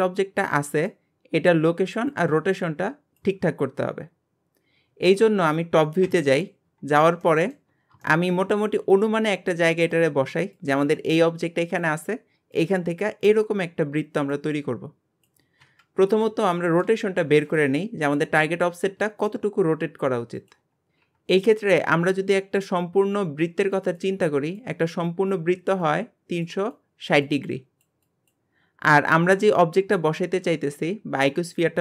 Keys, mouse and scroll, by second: 6.0 KP_7, 6.9-7.2 scroll down 1, 7.2-8.8 shift+middle drag, 8.8 g, 16.1-16.5 scroll up 1, 16.5-18.9 shift+middle drag, 18.9 r, 20.8 scroll down 2.